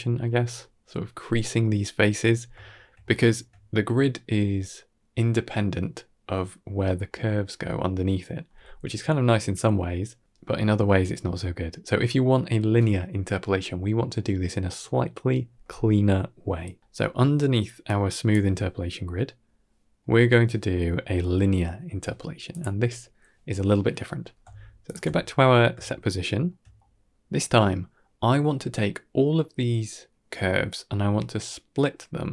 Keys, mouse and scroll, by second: 2.2 scroll down 3, 2.5 shift+middle drag, 2.9 scroll down 2, 3.1 shift+middle click, 6.3 middle drag, 6.7 middle click, 14.5 m, 15.9 ctrl+s, 16.4 scroll down 3, 16.7 middle click, 17.7 click, 22.4 click, 24.1 middle click, 24.7 alt+shift+click, 25.2 middle drag, 25.8-26.3 shift+middle drag, 26.6 middle click.